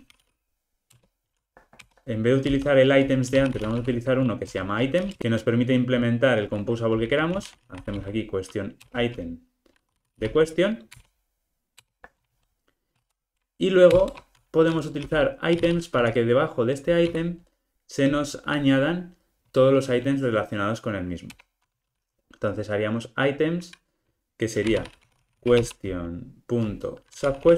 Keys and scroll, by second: 1.0 Return, 9.0 Return, 21.4 Return.